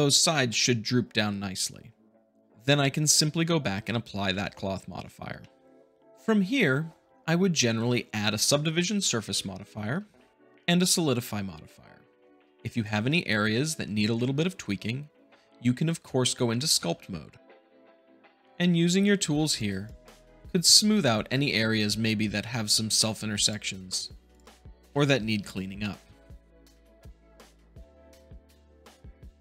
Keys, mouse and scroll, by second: 0.0-1.0 middle drag, 3.0-3.8 drag, 4.2 ctrl+a, 5.4-6.1 middle drag, 7.2 middle click, 9.3 ctrl+2, 10.3 click, 10.7 click, 13.5-14.5 middle drag, 14.5-15.5 scroll up 2, 16.7 ctrl+Tab, 18.4 click, 19.4 click, 20.9 click, 23.4 shift+click, 23.9 shift+click, 24.2 shift+click, 24.8-25.9 middle drag, 26.5 Tab, 26.7 click, 27.0 click, 27.6 click, 27.9 click, 28.0 click, 28.4 click, 29.0 click, 29.2 click.